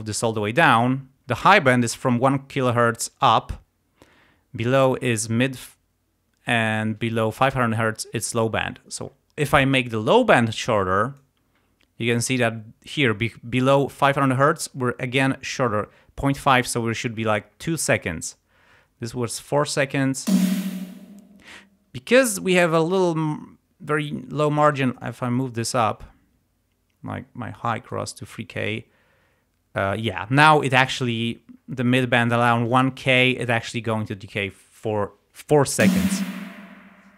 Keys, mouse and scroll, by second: 10.2-11.4 drag, 20.3 space, 21.2 space, 24.8-28.1 drag, 35.8 space.